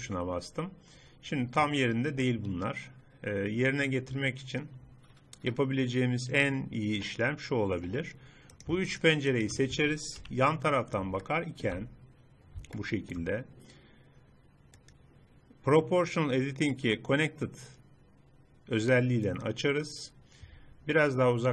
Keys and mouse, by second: 2.3 middle click, 3.5-4.6 middle drag, 8.5-10.3 middle drag, 10.3 KP_3, 12.8 middle click, 13.0 middle click, 13.7-17.9 drag, 20.2-21.5 middle drag.